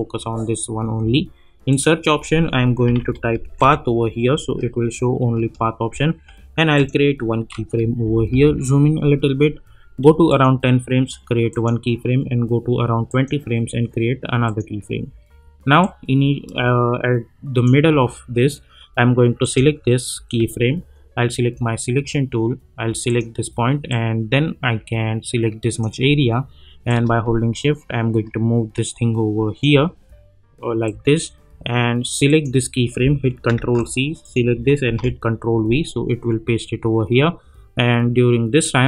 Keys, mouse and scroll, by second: 1.7 click, 2.8-4.1 typing, 6.7 click, 8.0 =, 8.3 =, 10.3-19.4 drag, 23.0-30.8 drag, 30.8-32.3 drag, 33.5 ctrl+c, 34.2 click, 34.8 ctrl+v.